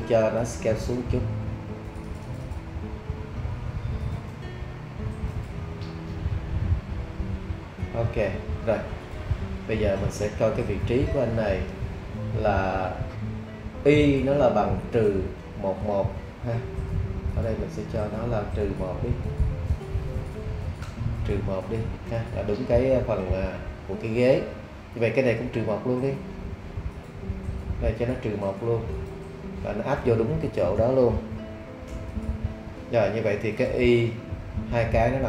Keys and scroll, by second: 20.3 BackSpace, 20.8 Return, 30.8 -, 31.3 1, 31.9 Return.